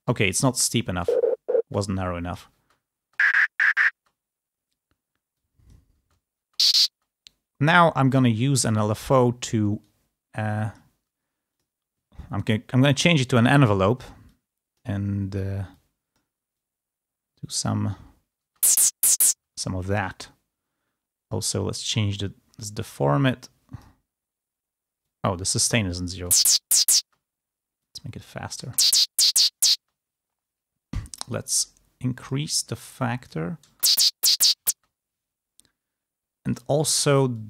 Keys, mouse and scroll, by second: 0.9 space, 2.6 space, 3.9 space, 5.3 click, 6.0 space, 8.1 click, 9.8-10.9 drag, 11.5 click, 13.2 click, 14.3 click, 15.8 click, 16.5-17.8 drag, 18.5 space, 19.2 space, 22.1-23.9 drag, 25.0 click, 26.1 space, 27.0 space, 27.7 click, 28.5 space, 29.8 space, 31.1 click, 32.2 click, 32.8 click, 33.6 space, 34.7 space, 36.5 click, 37.3 click.